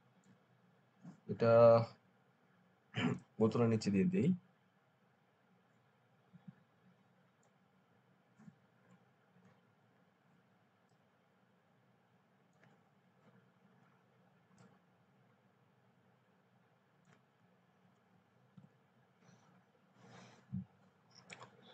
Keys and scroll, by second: 18.4 ctrl+alt+0.